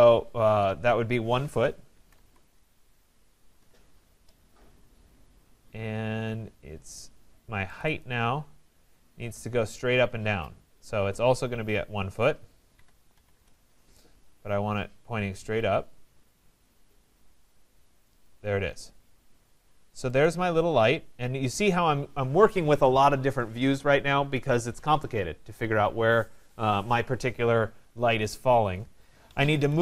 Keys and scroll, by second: 3.4 Return, 13.3 Return, 29.6 Return.